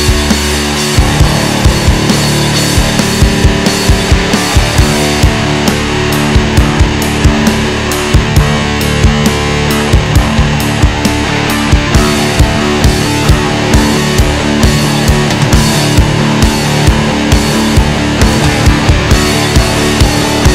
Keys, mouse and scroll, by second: 1.8 click, 3.3 click, 5.5-5.8 scroll down 1, 5.8 Tab, 6.2 scroll up 1, 7.3 shift+scroll up 1, 7.4-7.8 shift+middle drag, 7.8 scroll down 1, 8.0-9.7 middle drag, 9.7 KP_1, 9.8-10.2 scroll up 2, 10.2 alt+z, 11.0-11.5 shift+middle drag, 11.5 scroll down 1, 11.9-15.2 shift+middle drag, 15.2-15.5 scroll up 2, 15.5-18.2 shift+middle drag, 18.2 Tab, 18.4-20.0 middle drag, 20.0-20.5 scroll up 1.